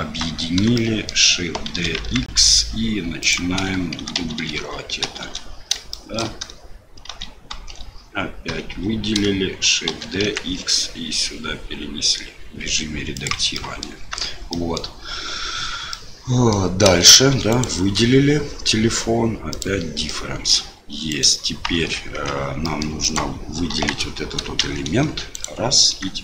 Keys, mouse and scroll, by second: 0.0 Tab, 0.7 shift+click, 1.7 shift+d, 3.9-5.0 typing, 6.0 shift+click, 7.0 shift+r, 7.5 shift+r, 8.4 a, 9.8 shift+d, 13.6 middle click, 14.1 Tab, 14.5 middle click, 15.9 middle click, 17.5 shift+click, 20.1 middle click, 21.0 right click, 21.7 Tab, 22.1 Tab, 22.6 middle click, 23.0 right click, 23.7 KP_1, 24.6 shift+z, 25.3 click.